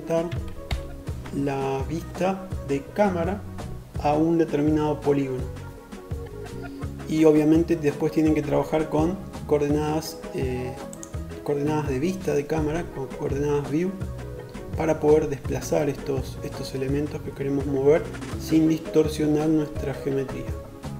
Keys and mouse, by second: 9.5-20.9 drag.